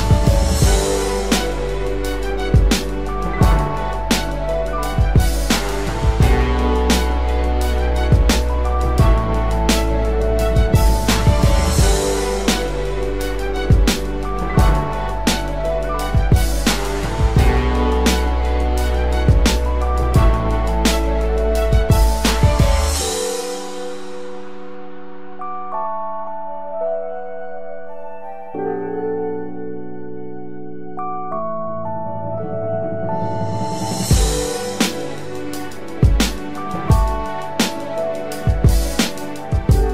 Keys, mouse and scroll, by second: 21.3-22.7 typing, 24.9 typing, 26.2 typing, 29.4 double click, 33.0 typing, 34.1 double click, 36.9 double click.